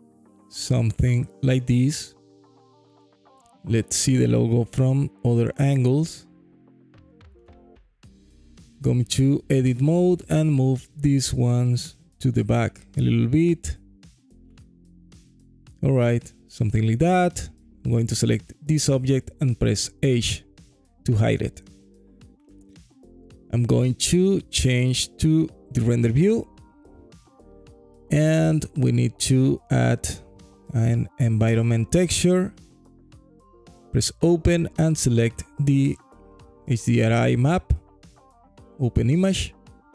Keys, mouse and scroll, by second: 1.7 click, 2.0 Tab, 2.4-3.1 alt+drag, 4.1-6.3 alt+drag, 6.7 ctrl+z, 7.0 KP_3, 7.7 Tab, 8.6 1, 8.8 click, 10.0 g, 13.5 click, 13.9 Tab, 14.3 alt+click, 15.1 z, 15.9 click, 16.8 click, 17.6 click, 18.2 h, 18.8-20.5 alt+drag, 20.7 scroll down 1, 21.0 alt+middle click, 21.3 alt+scroll down 1, 21.5-22.0 scroll up 2, 22.2 alt+middle click, 22.4 alt+click, 22.4-23.3 scroll up 1, 23.8 click, 27.7 click, 29.7-32.7 drag, 34.1 click.